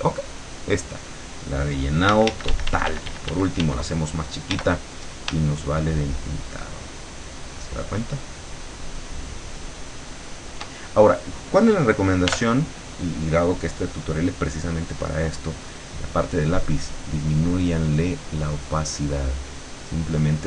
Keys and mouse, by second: 0.0 click, 2.1 d, 4.6 d, 6.1-10.7 shift+drag, 12.3 l, 15.5 click, 16.8-20.4 drag.